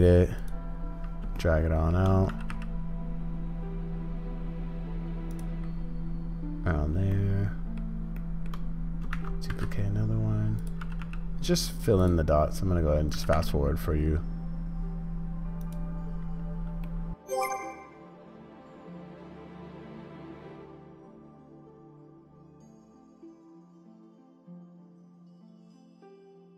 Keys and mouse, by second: 1.4 shift+middle click, 7.2 shift+middle click, 8.2 shift+middle click, 9.1 shift+d, 10.9 g, 13.2 g, 16.9 middle click, 17.7 middle click, 18.1 g, 18.2 g, 18.7 middle click, 18.8 middle click, 19.1 middle click, 20.1-23.9 typing, 20.2 click, 20.8 shift+click, 20.8 shift+middle click, 21.0 shift+middle click, 21.7 click, 22.5 middle click, 23.1 middle click, 23.3 middle click, 23.5 middle click, 23.7 middle click, 24.1 middle click, 24.3 middle click, 24.8 middle click, 24.9 shift+d, 25.2 g, 25.8 click, 25.8 g, 26.0 g, 26.1 click.